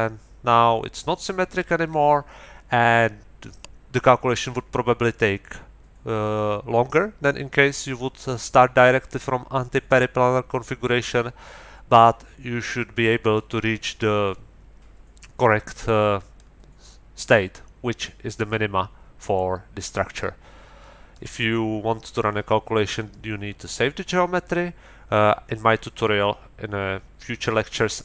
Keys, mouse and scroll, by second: 16.3-21.3 middle drag.